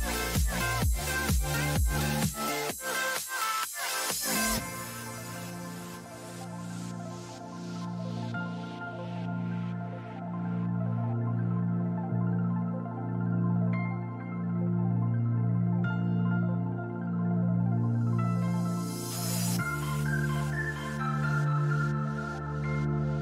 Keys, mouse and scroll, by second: 2.2-7.2 middle drag, 9.0-11.0 drag.